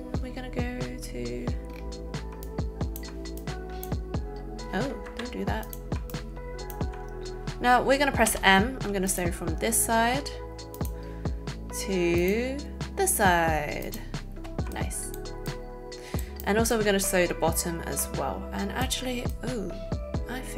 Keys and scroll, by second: 5.1 Escape, 8.2 m.